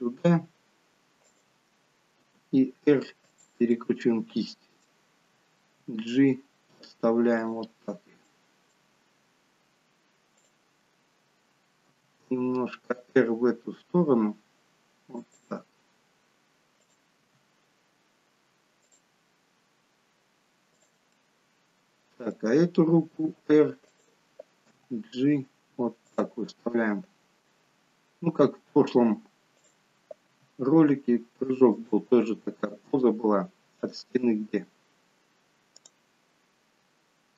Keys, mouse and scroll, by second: 2.3 r, 3.8 middle click, 5.8 g, 8.2 middle click, 10.5 click, 12.0 r, 16.8 click, 17.2 r, 20.8 click, 21.3 middle click, 23.3 r, 24.7 g, 29.7 click, 30.4 r, 33.8 click, 35.9 click.